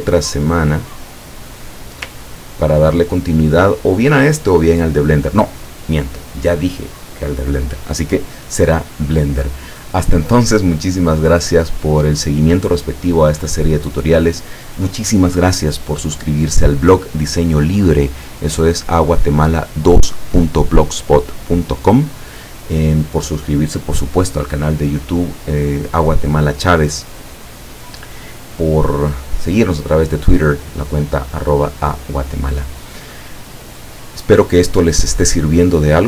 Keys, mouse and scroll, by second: 2.4-2.7 ctrl+scroll down 2.